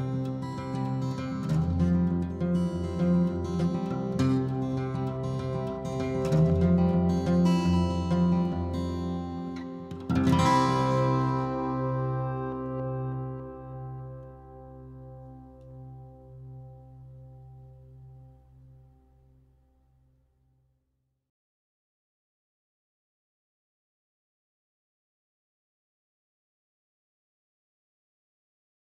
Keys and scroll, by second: 0.5-2.9 typing, 3.1 Return, 4.1 p, 5.3 ctrl+g, 6.5 l, 10.4 m, 12.8 Escape, 13.6 m, 14.9 m, 16.9 Delete, 18.6 r, 20.5-21.8 typing, 22.5 ctrl+x, 23.3-24.5 typing, 24.9 ctrl+g, 26.4-28.6 typing.